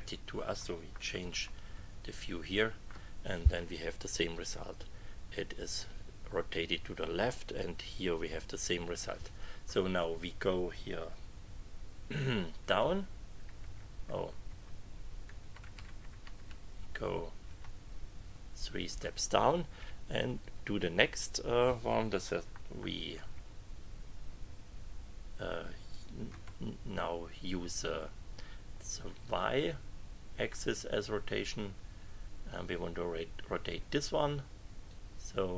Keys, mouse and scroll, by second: 1.2 click, 1.7 KP_6, 10.0 click, 12.6 Down, 13.6 Up, 14.5 Right, 15.4 Left, 17.4 Right, 23.1 KP_4, 26.3 KP_1, 34.9-35.5 drag.